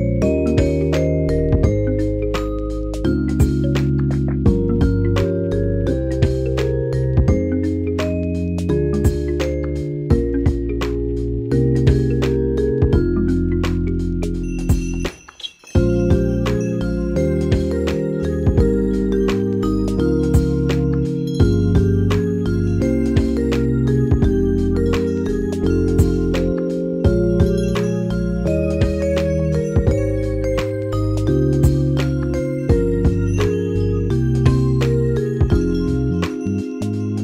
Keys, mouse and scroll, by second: 0.3 alt+click, 1.2 ctrl+z, 1.9-3.4 drag, 3.4 alt+click, 4.4 alt+click, 5.5 alt+click, 6.4 alt+click, 7.3-10.7 alt+drag, 10.7 click, 11.5 ctrl+c, 11.8 ctrl+f, 12.3-16.2 drag, 16.0 ctrl+shift+Num_Lock, 16.1 [, 17.1 click, 17.7 ctrl+shift+[, 19.4 click, 20.2 shift+click, 21.1 ctrl+shift+[, 22.0 click, 23.4 space, 23.4 click, 23.6 space, 25.7 click, 27.6-31.4 alt+shift+drag, 33.6 click, 33.7-35.8 drag.